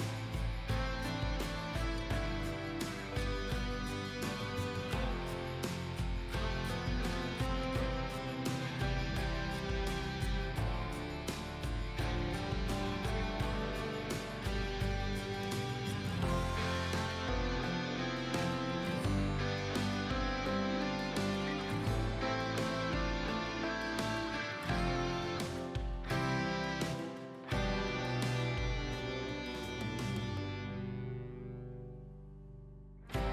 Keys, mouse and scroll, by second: 3.6 alt+scroll down 1, 4.7 click, 6.1 alt+scroll down 1, 6.9 click, 7.7 scroll down 1, 8.4-8.9 alt+scroll up 2, 9.6-13.3 drag, 13.8 alt+scroll down 1, 15.0 alt+scroll up 2, 16.3-21.3 drag, 21.5 alt+scroll down 1, 22.4 click, 23.3 alt+scroll up 1, 25.2-29.6 drag, 30.4 ctrl+z, 31.2-33.2 drag.